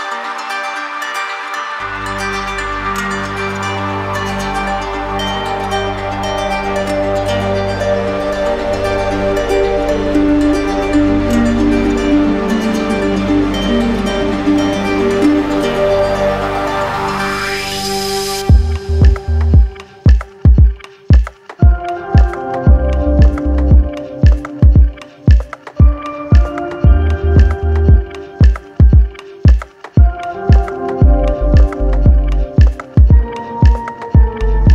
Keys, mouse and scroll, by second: 0.0 alt+click, 1.0 click, 1.9 click, 4.3 click, 5.1 alt+click, 6.5 click, 7.1 shift+click, 8.0 alt+click, 9.8 click, 10.7 alt+click, 11.5 shift+click, 12.4 shift+click, 13.5 click, 15.3 click, 16.6 alt+click, 17.4 click, 18.5 click, 20.1 click, 22.1 click, 22.8 click, 23.6-24.6 drag, 25.2-26.3 drag, 26.0 z, 26.6-27.7 drag, 29.7 click, 31.8 click, 32.4 click, 33.8 click.